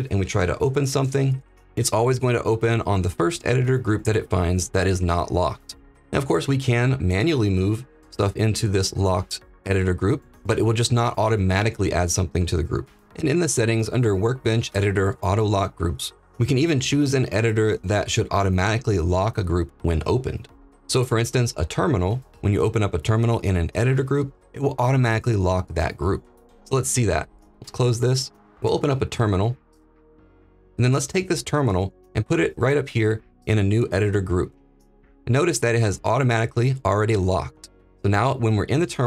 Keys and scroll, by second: 0.6 ctrl+p, 28.5 ctrl+`.